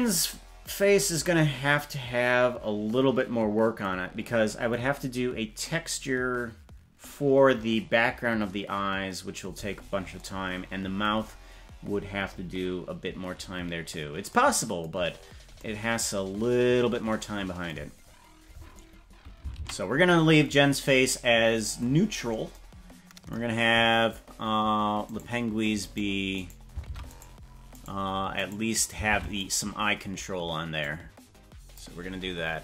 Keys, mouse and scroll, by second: 15.0-15.5 scroll down 3, 19.7 ctrl+s, 22.0-22.5 scroll down 3, 25.0 right click, 25.8 right click, 26.3 right click, 26.8 ctrl+Tab, 27.1 right click, 27.7 right click, 28.5 right click, 29.1 ctrl+Tab, 29.4 right click, 30.7 click.